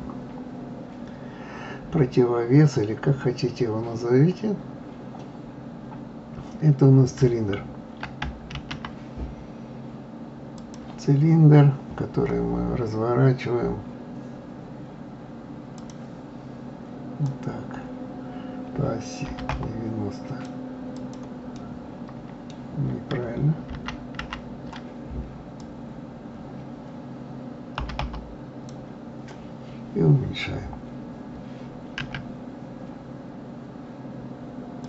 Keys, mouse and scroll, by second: 1.0 scroll down 3, 1.6-3.3 scroll up 1, 8.6 shift+a, 15.8-20.2 drag, 20.9 click, 21.5-23.7 middle drag, 23.7 ctrl+z, 24.2 ctrl+z, 25.6-28.6 drag.